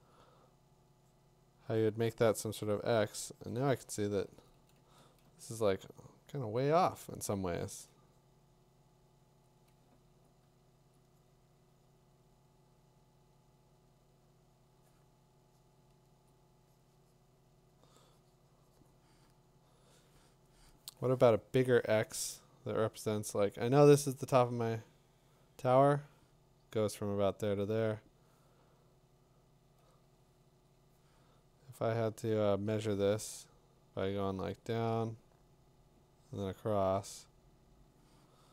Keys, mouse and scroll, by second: 4.3-5.2 typing, 7.4 [, 7.7 [, 10.9-14.0 drag, 16.2 click, 30.5 click.